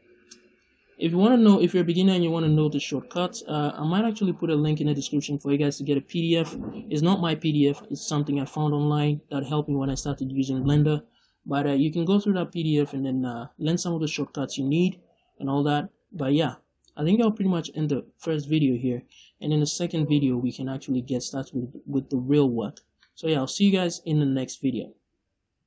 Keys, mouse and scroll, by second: 16.1 middle click, 16.9-23.6 middle drag, 18.9 scroll down 2, 20.0-20.5 scroll up 2, 20.5-21.5 scroll up 1, 21.5-22.9 scroll up 1, 23.8 middle click.